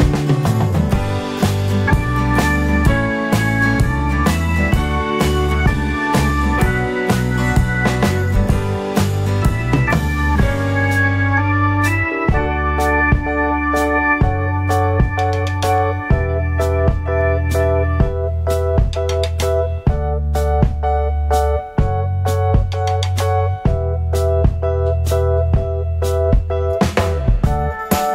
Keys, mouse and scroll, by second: 0.8 middle click, 0.8 scroll down 1, 2.7 F3, 4.2 ctrl+click, 9.5 alt+click, 13.0 middle click, 15.4 middle click, 16.0 alt+middle click, 16.6 alt+middle click, 18.2 ctrl+click, 23.2 middle click, 23.6 middle click, 26.0 ctrl+click.